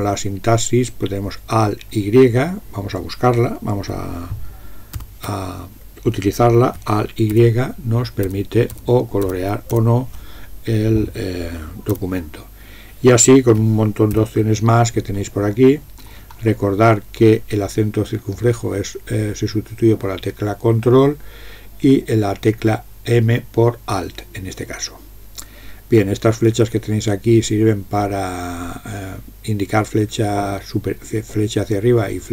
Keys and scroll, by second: 5.0 ctrl+x, 7.4 alt+y, 8.3 alt+y, 8.8 alt+y, 9.3 alt+y, 9.8 alt+y, 14.2 ctrl+g.